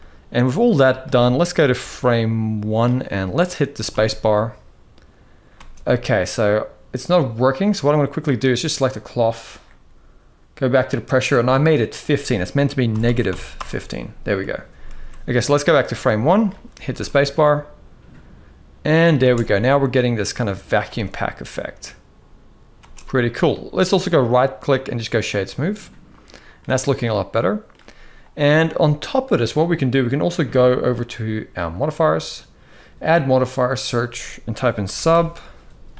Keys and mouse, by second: 1.7 click, 2.9 middle click, 3.6 space, 5.3 space, 8.0-8.4 drag, 11.1-13.3 drag, 14.7 ctrl+s, 15.5-16.2 drag, 16.6 space, 19.3-20.5 middle drag, 19.3 space, 20.6 space, 22.5 space, 22.7-23.2 middle drag, 23.8-24.8 right drag, 25.3-26.3 middle drag, 26.7-27.4 middle drag, 31.3 click, 32.5-35.9 drag.